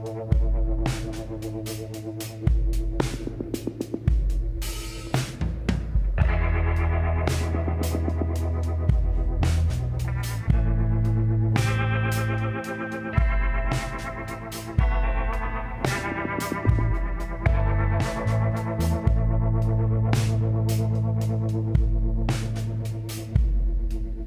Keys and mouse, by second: 0.3 shift+a, 1.9 s, 3.7 s, 7.4 KP_7, 8.1-10.6 middle drag, 9.0 s, 12.4 middle click, 13.6 s, 21.9 KP_1, 22.6 z, 23.5-24.2 drag.